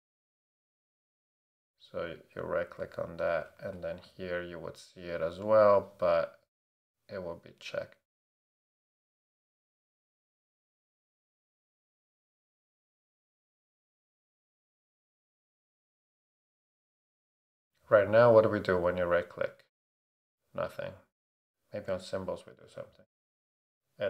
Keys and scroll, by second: 3.6 shift+super+d, 4.5 super+d, 10.4 Up, 10.7 x, 10.9 space.